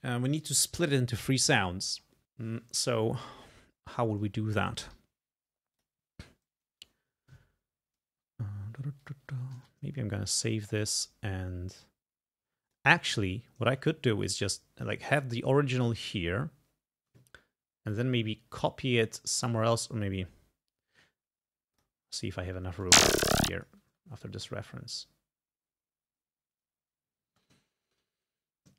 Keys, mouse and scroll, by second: 3.6 scroll up 2, 5.0 g, 5.8 click, 7.1 scroll down 2, 9.0 click, 9.6 ctrl+s, 9.9 ctrl+scroll down 2, 11.1 click, 11.6-12.0 scroll up 2, 14.3 scroll down 2, 15.0 scroll down 2, 15.7-16.1 ctrl+scroll down 2, 18.0 click, 19.6 ctrl+scroll up 2, 21.8 click, 22.7 space, 23.5 ctrl+space, 23.6 ctrl+click, 27.3 space, 27.7 ctrl+scroll down 2.